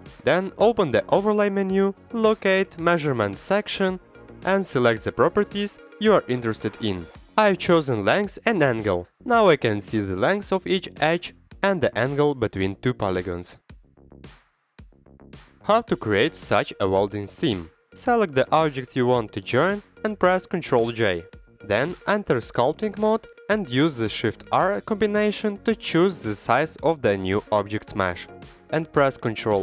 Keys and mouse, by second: 1.2 middle click, 2.8-9.3 drag, 9.6 middle click, 9.9 middle click, 10.3 click, 10.4 middle click, 10.9 middle click, 11.2 middle click, 11.9 middle click, 12.1 Tab, 12.2 Tab, 12.4 3, 12.6 click, 12.8 e, 13.0 s, 13.2 click, 13.6 click, 14.0 i, 14.4 click, 14.5 e, 15.3 q, 15.5-15.9 drag, 16.1-16.4 middle drag, 16.7 middle drag, 18.3-18.6 middle drag, 18.9 middle drag, 19.8 drag, 20.6 ctrl+j, 21.1 click, 21.3 shift+click, 21.6 click, 22.0 click, 22.6 ctrl+Tab, 26.0 middle click, 26.6 middle click, 27.0 middle click, 27.4 shift+r.